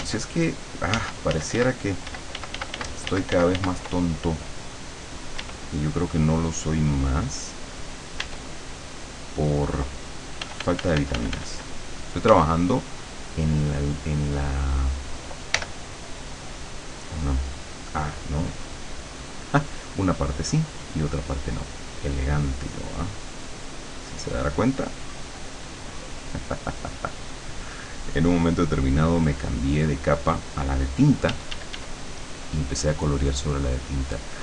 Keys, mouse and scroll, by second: 1.0 ctrl+z, 5.5 e, 7.0 click, 8.3 e, 10.5 f, 12.3 f, 12.6-15.1 drag, 15.6 l, 16.7 click, 18.2 click, 20.6 click, 22.4-30.7 drag, 31.3 d, 31.7-34.4 drag.